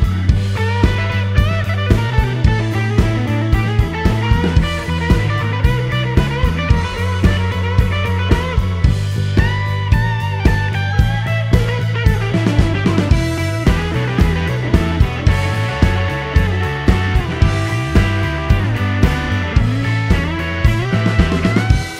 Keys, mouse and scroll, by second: 0.3 middle click, 0.8 scroll down 2, 0.9-1.3 scroll up 2, 2.1 click, 3.2 click, 4.3 click, 5.3 shift+p, 5.9 shift+middle click, 6.9 click, 8.3 click, 9.1 shift+click, 9.5 shift+p, 9.8 shift+middle click, 11.6 click, 13.4 click, 14.3 shift+click, 14.8 shift+p, 15.8 click, 16.9 click, 17.6 click, 18.0 shift+p, 18.8-19.5 shift+middle drag, 20.0-20.5 scroll up 1, 20.6-21.3 scroll up 2.